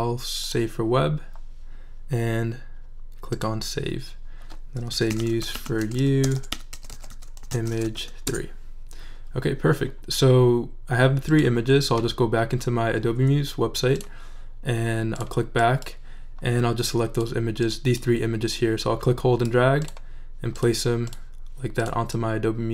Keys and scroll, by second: 4.7-8.5 typing.